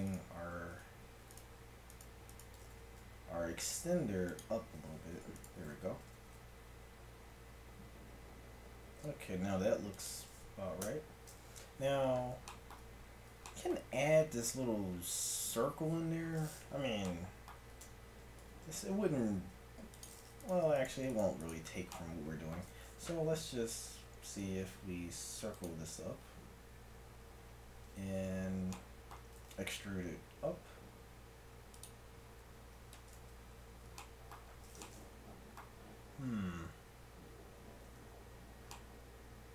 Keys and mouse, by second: 0.8 Tab, 2.6 g, 5.1 Tab, 5.4-7.2 right drag, 6.0 g, 10.8 Tab, 15.8-17.1 middle drag, 17.9 Tab, 18.5 Tab, 19.4 ctrl+Tab, 20.4 click, 23.6 w, 29.4 e, 32.9 KP_1, 38.1 Tab.